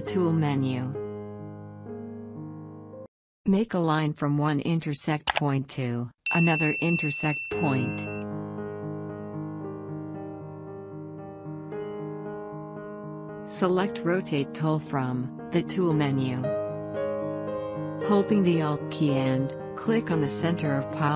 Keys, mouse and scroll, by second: 4.4-14.4 drag.